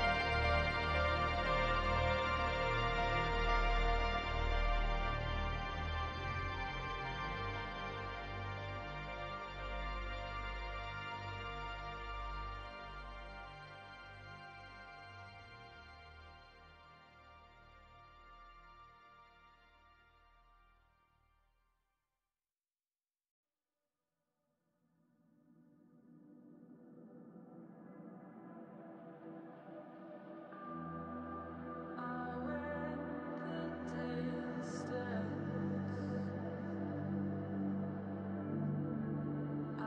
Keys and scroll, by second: 8.8 space, 11.2 space, 12.4 space, 13.8 space, 17.9 space, 19.7 space, 19.9 ctrl+z, 22.6 space, 26.7 space, 33.1 space, 37.4 space, 39.6 space.